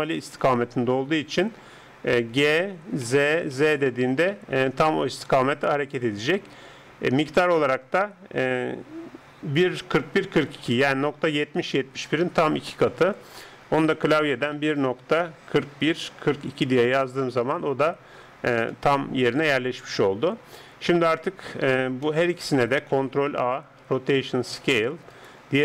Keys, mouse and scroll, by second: 2.3 g, 18.7-20.6 middle drag, 21.1 Tab, 22.1 middle click, 23.5 ctrl+a, 25.1 right click.